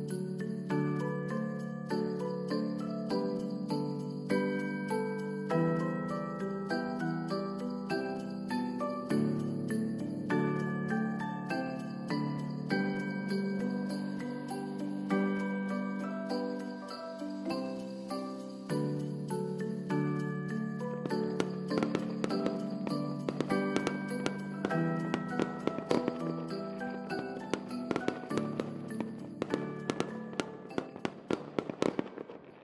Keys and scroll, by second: 0.3 n, 0.6 space, 4.9 space, 5.3 ctrl+s, 14.7 space.